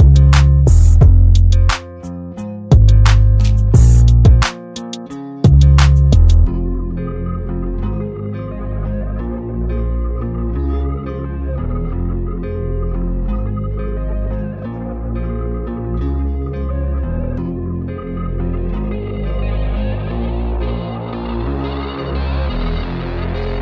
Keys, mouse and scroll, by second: 9.7-10.9 shift+drag, 13.9-14.9 alt+drag, 16.5-17.1 alt+drag, 19.0-19.3 alt+click.